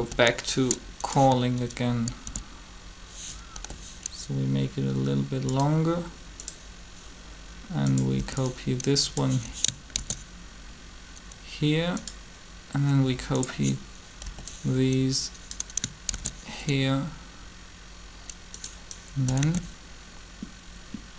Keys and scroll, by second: 2.2 shift+d, 3.5 g, 8.2 b, 10.0 shift+d, 14.2 b, 16.1 shift+d, 19.4 alt+a.